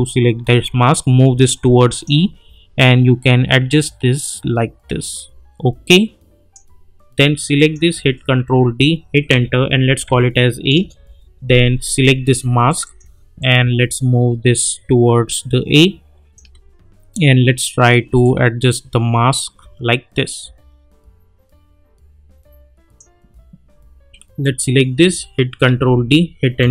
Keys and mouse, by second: 3.7-6.8 drag, 8.4 ctrl+d, 9.3 Return, 10.0 a, 10.7 Return, 12.7-18.2 drag, 18.2-23.2 drag, 25.6 ctrl+d, 26.6 Return.